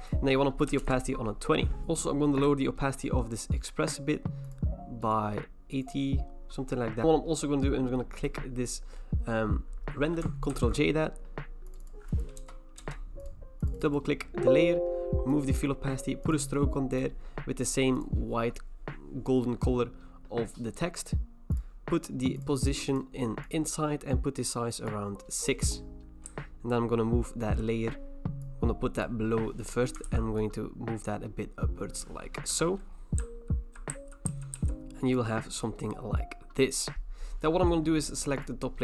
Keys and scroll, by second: 0.7-1.5 typing, 10.5 ctrl+j, 12.4 BackSpace, 12.8 BackSpace, 26.3 Right, 26.8 Right, 26.8 Right, 26.8 Right, 26.9 Right, 27.0 Right, 27.3 Right, 27.5-34.3 Right, 30.0 ctrl+t, 32.5 Return, 33.2 Left, 33.7 Left, 33.9 Left, 33.9 Down, 34.3 Down, 34.5 Down.